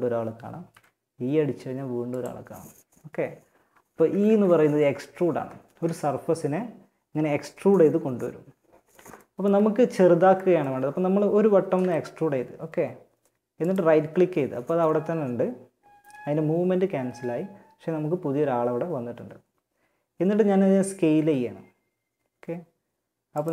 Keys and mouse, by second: 3.1 ctrl+z, 3.5 ctrl+z, 3.9 ctrl+z, 11.0 e, 20.3 s.